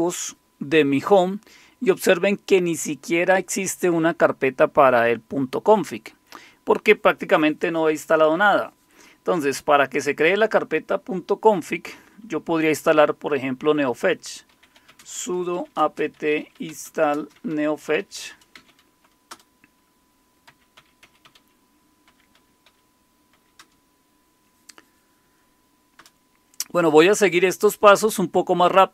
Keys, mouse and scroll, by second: 14.4-24.1 typing, 25.7-27.3 typing.